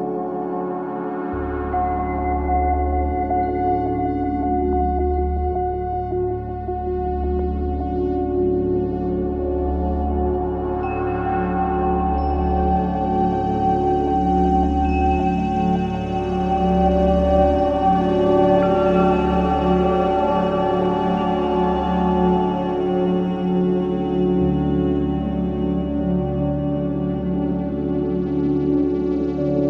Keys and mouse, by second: 0.3 ctrl+z, 0.9 ctrl+z, 1.7 click, 4.3 click, 5.4 click, 7.9 Tab, 9.0 s, 9.3 x, 10.6 click, 11.2-11.9 typing, 12.5 Escape, 13.3-13.8 typing, 14.3 click, 15.3 alt+click, 16.0 ctrl+alt+click, 16.5 ctrl+alt+click, 18.1-19.1 typing, 19.9 click, 21.8 click, 22.2 typing, 23.0 click, 23.9 click, 24.5 click, 26.6 shift+click, 26.9 shift+click, 27.4 shift+click, 28.0-29.5 typing.